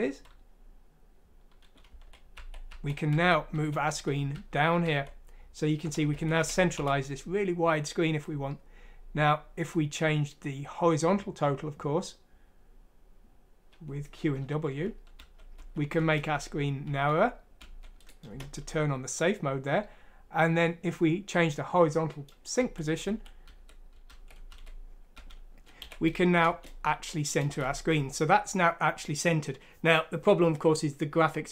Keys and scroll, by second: 1.7-7.3 typing, 14.6-18.3 typing, 22.6-27.5 typing.